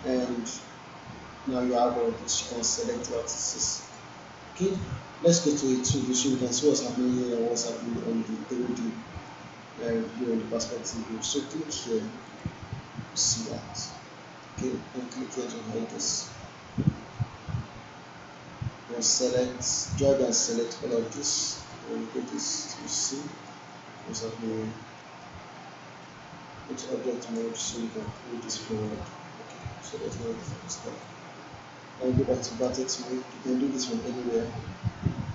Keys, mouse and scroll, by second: 2.5 click, 9.1 click, 12.3 click, 15.0 click, 17.2-17.8 alt+middle drag, 19.2-21.4 drag, 21.7-22.6 alt+click, 22.7 alt+middle click, 23.3-23.6 alt+click, 25.0 alt+middle click, 26.0-27.6 right drag, 28.0 click, 30.1 alt+middle click, 30.6 alt+click, 31.0-33.0 right drag, 33.8 alt+scroll down 1, 34.0-34.6 alt+middle drag.